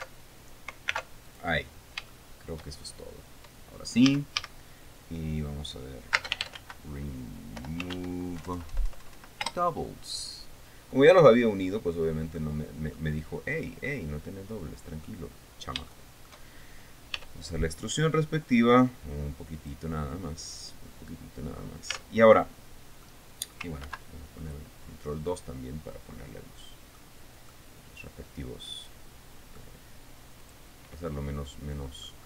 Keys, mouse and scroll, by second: 1.4 alt+m, 1.8 alt+click, 2.3-2.7 alt+scroll down 4, 2.7 shift+middle click, 3.4 shift+scroll up 2, 3.8 scroll down 2, 4.6 a, 6.7-9.0 typing, 10.0 Return, 12.2-12.6 scroll down 2, 13.0 middle click, 14.4-15.8 middle drag, 15.9-16.2 scroll up 2, 16.4 shift+middle click, 16.6 shift+scroll up 1, 17.7 e, 20.1 click, 22.5 Tab, 22.9 click, 23.0 middle click, 23.0 click, 24.4 ctrl+2, 25.8-27.7 middle drag, 28.0-30.3 middle drag, 31.0 click, 31.6-32.2 middle drag.